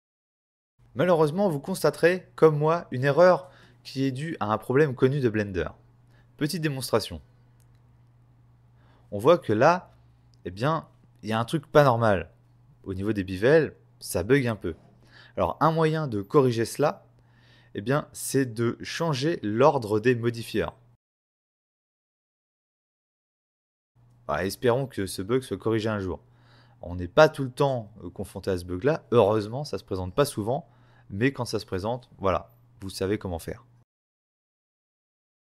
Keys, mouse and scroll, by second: 1.5 click, 2.1 middle click, 4.0 right click, 5.5 f, 6.8 click, 7.6 right click, 9.4 ctrl+space, 18.3 click, 19.3 click, 20.4 click, 23.9 click, 27.2 click, 31.3 right click, 33.5 right click, 35.4 right click, 35.5 right click.